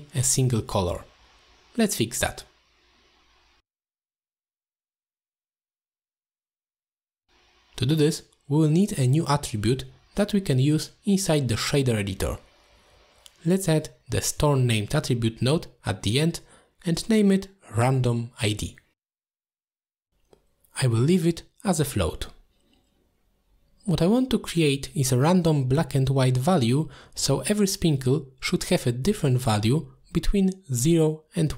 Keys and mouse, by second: 0.3 middle click, 0.5 z, 2.5 middle drag, 4.2 click, 5.4 click, 8.1 middle drag, 9.7 middle drag, 10.3 click, 11.0 middle click, 11.0 z, 12.8-13.3 drag, 13.8-17.1 drag, 18.2-21.2 drag, 23.0 click, 24.2-25.2 drag, 27.3 middle click, 28.3 click.